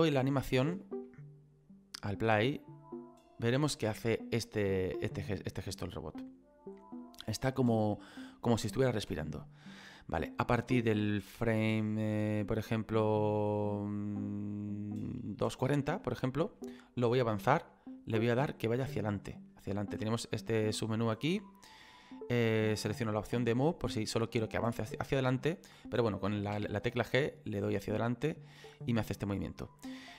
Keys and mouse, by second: 0.6 space, 1.1 middle click, 9.1 space, 10.2 click, 16.0 middle click, 18.6 middle click, 20.6 click, 23.2 click, 28.4 click, 28.6 middle click.